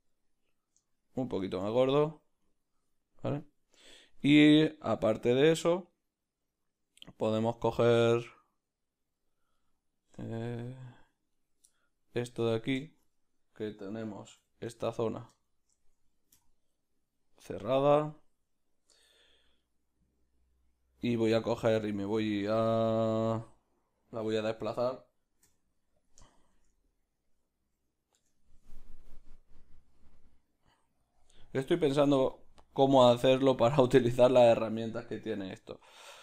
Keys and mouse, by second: 1.7 middle click, 2.5-11.6 right drag, 9.6-11.3 middle drag, 11.6-14.9 middle drag, 12.5 Tab, 14.4 2, 14.9-16.4 alt+right drag, 16.4 f, 16.7-18.0 middle drag, 18.0 a, 19.6 middle click, 26.1 q, 26.3 shift+middle click, 28.3 Tab, 31.1-36.2 drag, 34.1-36.2 shift+middle drag.